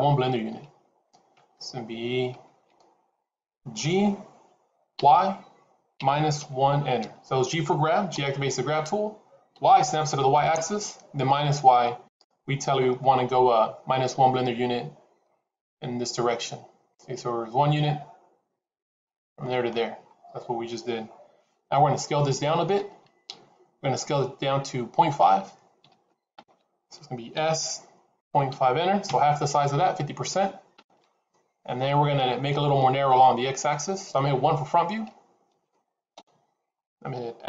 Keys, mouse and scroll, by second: 3.9 g, 8.1 g, 12.8-13.1 scroll down 1, 15.1 scroll down 6, 19.9 scroll up 3, 27.2 s, 36.1 KP_1.